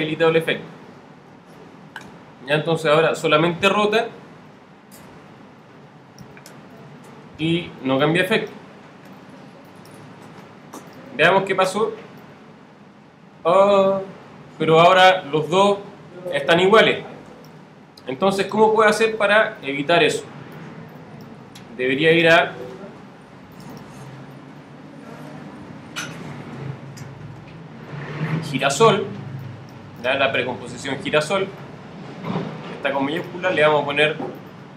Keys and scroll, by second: 0.1 alt+super+-.